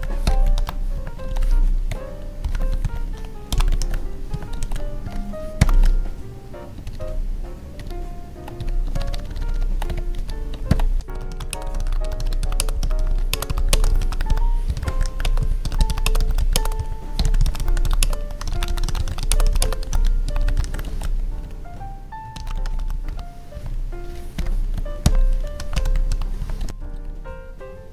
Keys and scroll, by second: 0.9 Tab, 1.2 ctrl+s, 4.2 Tab, 4.6 ctrl+s, 5.0 Right, 5.7 ctrl+s, 6.8 ctrl+Down, 8.5 Up, 8.9 ctrl+Left, 10.1 Up, 10.6 ctrl+/, 11.5 space, 12.5 space, 13.3 space, 13.7 space, 15.2 space, 16.0 space, 16.5 space, 18.0 space, 19.3 space, 19.6 space, 20.8 ctrl+s, 23.5 Tab, 26.3 Tab, 26.9 ctrl+`.